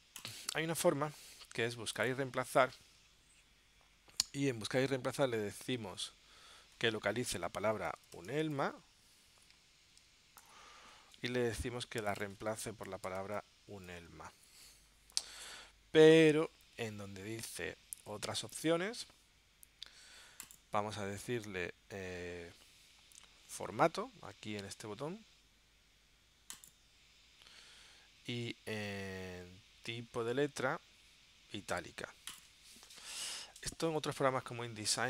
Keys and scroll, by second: 8.0 shift+u, 10.6 ctrl+alt+super+p, 13.0 shift+u.